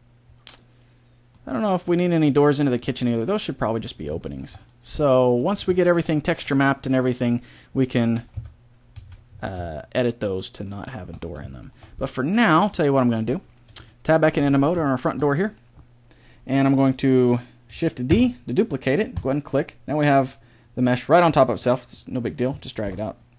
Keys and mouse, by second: 0.5 middle click, 0.7 middle click, 5.1 middle click, 8.1 KP_7, 8.4 KP_5, 8.9 z, 12.5 Tab, 18.1 shift+d, 21.5-22.6 drag, 22.6 middle click.